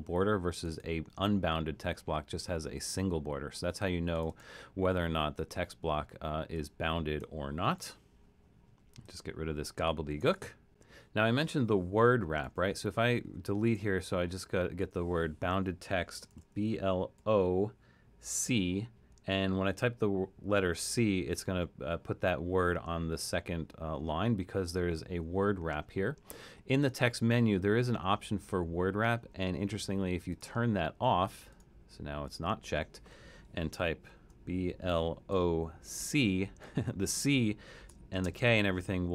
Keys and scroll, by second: 7.9 BackSpace, 9.9 BackSpace, 12.0 BackSpace, 12.5 BackSpace, 13.2 BackSpace, 13.8 BackSpace, 14.9 BackSpace, 16.1-17.2 typing, 18.5 typing, 24.4 BackSpace, 34.2 BackSpace, 35.3-36.0 typing, 37.8-38.6 typing.